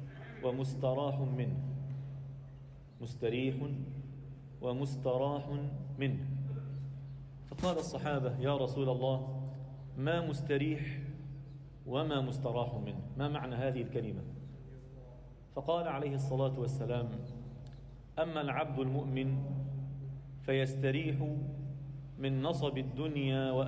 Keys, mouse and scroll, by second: 0.6 g, 3.5 alt+middle click, 4.6 g, 9.0 x, 15.8 scroll up 1, 16.2 alt+middle click, 16.9 2, 20.0 click, 20.7-21.5 scroll down 1, 21.5 KP_7, 22.1 alt+shift+middle click, 22.4 scroll up 1, 22.8 alt+shift+middle click, 23.1 ctrl+middle click.